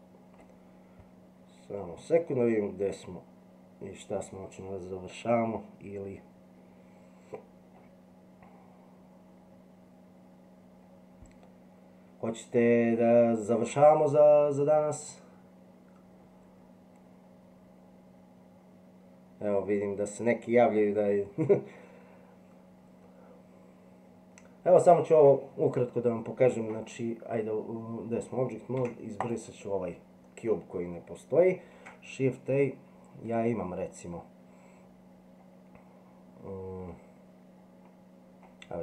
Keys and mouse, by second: 28.8 x, 31.7 shift+a.